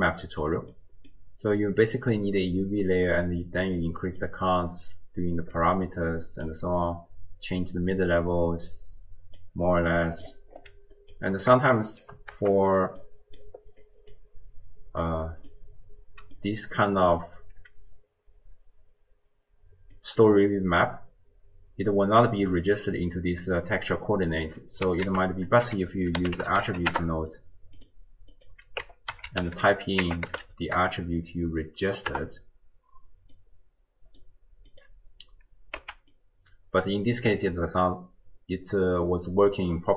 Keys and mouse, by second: 0.7 click, 0.9 middle click, 0.9 click, 1.9 middle click, 3.2 click, 4.3-6.6 drag, 6.9-9.5 drag, 9.9 middle click, 11.2 click, 11.8 shift+click, 12.4 g, 13.0 middle click, 13.9 click, 15.2 click, 16.5 middle click, 20.0 click, 22.5-23.7 d, 22.9 click, 23.9 d, 24.0 click, 24.5 d, 24.5 d, 25.1 ctrl+a, 26.5 i, 28.3-32.3 drag, 33.4-34.5 drag, 34.8 click, 35.8 x, 36.2 click.